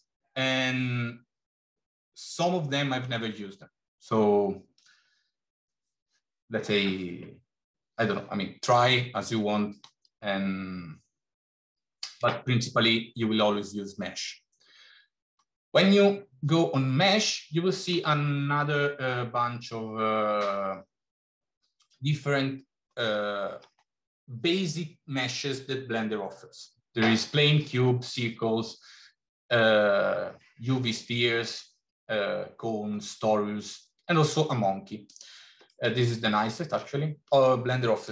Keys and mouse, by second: 35.7-36.5 middle drag, 37.5 middle click.